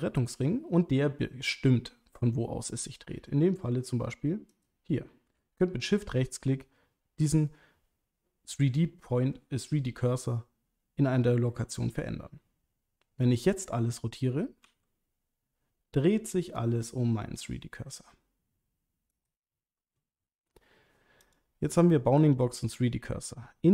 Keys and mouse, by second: 4.5 shift+right click, 14.6 r, 19.1 right click, 21.2-23.7 drag.